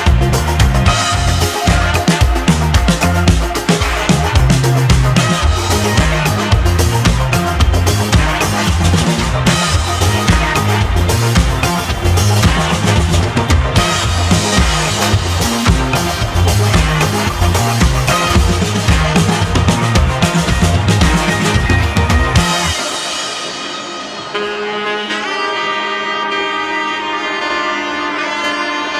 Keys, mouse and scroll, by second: 5.7 Tab, 6.6 g, 11.3 Tab, 12.1 click, 13.9-14.4 scroll down 5, 16.0 click, 17.1 g, 18.9 Tab, 19.5-19.8 scroll down 1, 19.8-20.2 scroll up 3, 20.2-21.3 scroll down 2, 21.3-22.8 middle drag, 23.9-24.5 shift+middle drag, 24.5-25.1 scroll up 3, 25.1-28.9 shift+middle drag.